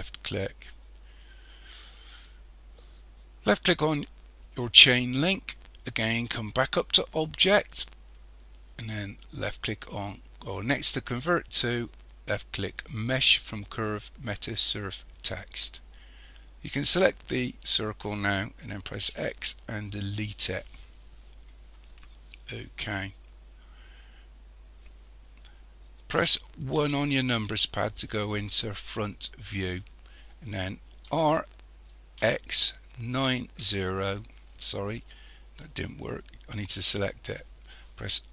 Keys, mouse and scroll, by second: 4.5 click, 7.2 click, 16.8 click, 19.0 x, 21.3-22.0 scroll down 5, 22.7-23.3 scroll down 2, 26.8 KP_1, 31.1 r, 32.2 x, 36.9 click.